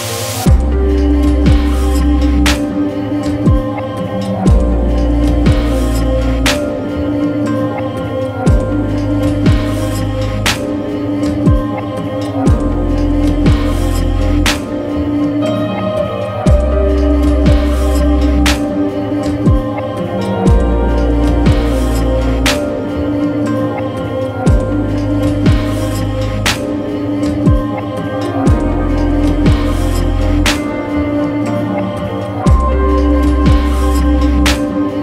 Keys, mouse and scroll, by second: 0.4-1.4 scroll down 1, 1.4 l, 3.0 scroll up 1, 3.3 x, 4.2 click, 5.7 Escape, 5.9 middle click, 7.4 l, 7.9 x, 8.6 click, 10.8 Escape, 11.3-12.0 scroll down 1, 13.1 click, 14.3 scroll up 1, 17.6 ctrl+z, 22.2 scroll up 1, 27.8 click, 31.8 middle click.